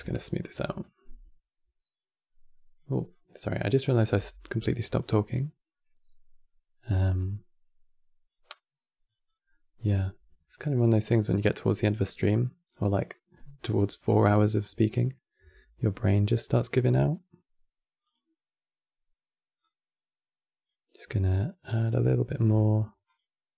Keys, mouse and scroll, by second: 0.5-3.8 drag, 3.8 f, 4.7-7.7 drag, 8.2-13.9 drag, 17.7-22.2 drag, 22.2 f, 23.4-23.5 drag.